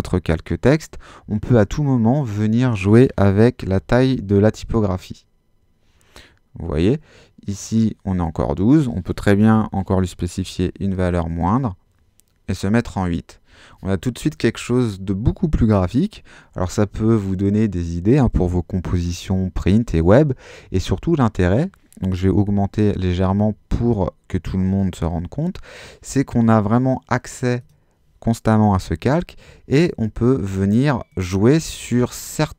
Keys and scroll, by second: 3.6 i, 3.9 2, 4.6 Home, 9.4 Delete, 10.4 8, 10.9 Return, 22.4 i, 22.7 4, 23.4 Return.